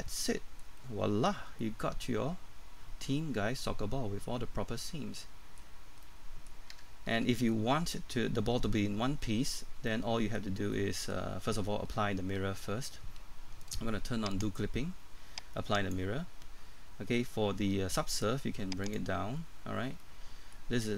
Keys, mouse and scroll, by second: 1.4 scroll down 1, 1.6 middle click, 5.8 scroll up 1, 6.0 middle click, 6.7 Tab, 7.5 middle click, 10.4 scroll down 1, 10.7 middle click, 14.3 click, 20.0 middle click.